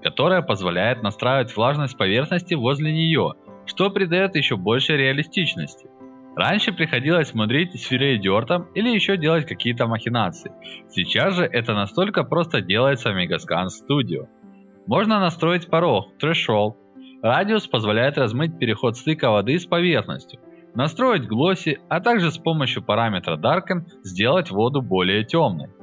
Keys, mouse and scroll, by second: 9.4-10.8 drag, 10.8-12.7 right drag, 12.7 click, 13.0-15.2 right drag, 16.0-17.4 right drag, 17.4-20.5 drag, 21.2-23.6 drag, 24.0-25.8 drag.